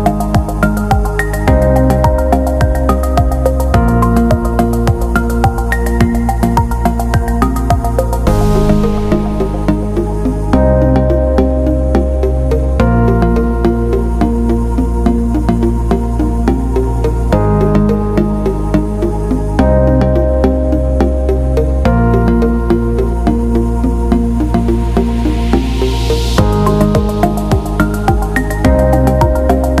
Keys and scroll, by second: 5.9 shift+Down, 8.9 ctrl+2, 14.7 Delete, 19.3 ctrl+z, 20.4 ctrl+z, 21.7 ctrl+z, 27.4 ctrl+-.